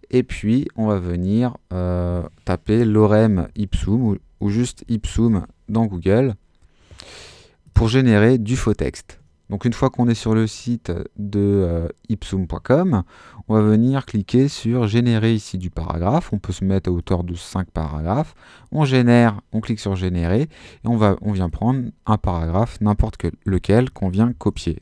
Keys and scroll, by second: 2.8-5.2 typing, 5.3 Return, 24.3 super+c.